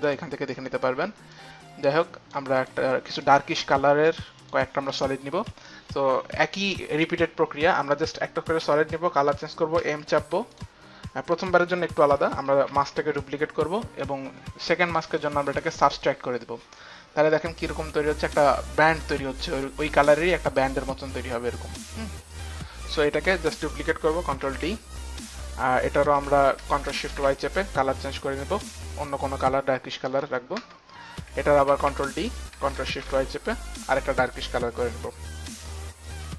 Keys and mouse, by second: 1.3 click, 1.9 click, 2.6 click, 3.2 click, 4.5 click, 9.8 m, 12.6 ctrl+d, 12.6 m, 14.0 ctrl+d, 15.1 click, 15.9 click, 17.3 click, 20.7 click, 23.6 click, 24.4 ctrl+d, 24.4 click, 24.9 ctrl+d, 26.6 ctrl+shift+d, 26.6 click, 28.0 click, 29.1 click, 30.5 Return, 31.6 ctrl+d, 33.0 Return, 33.0 ctrl+d, 33.0 click, 34.3 click, 35.1 ctrl+d, 35.1 click, 35.9 click, 36.0 click.